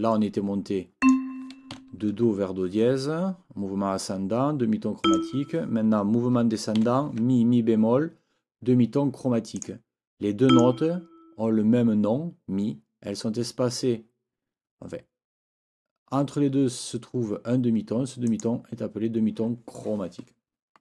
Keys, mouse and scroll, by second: 1.0 click, 1.7 shift+Right, 5.0 click, 6.8 shift+Right, 9.5 click, 9.6 scroll up 2, 9.7 click, 10.5 click, 10.5 scroll up 2, 18.3-18.6 scroll up 2.